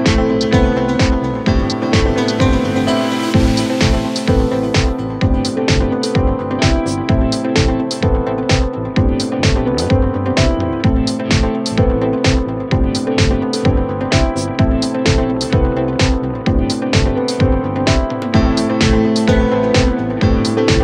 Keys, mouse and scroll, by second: 0.0 scroll up 1, 0.1 scroll down 2, 0.3-1.5 scroll up 2, 3.3 click, 3.7 middle click, 4.6 click, 4.8 middle click, 5.7 scroll down 1, 6.0-7.1 middle drag, 8.4-10.8 drag, 10.8 KP_1, 11.2 KP_7, 11.5 scroll up 4, 11.6-11.9 scroll down 1, 11.9-14.2 drag, 15.5 click, 16.2-16.6 scroll up 1, 16.6-17.0 scroll down 3, 17.0 scroll up 7, 17.3 click, 17.5 middle click, 17.9 Tab, 18.5 middle click, 18.7 KP_1, 18.8 KP_3, 19.3 scroll down 1, 19.4 scroll up 2, 19.9-20.4 drag, 20.4-20.8 scroll down 1.